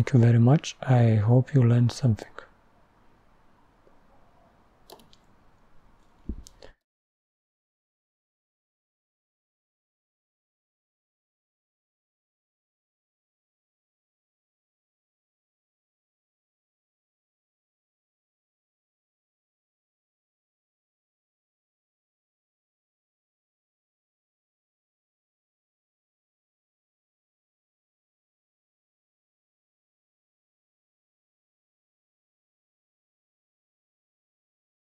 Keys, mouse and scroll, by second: 2.0 typing.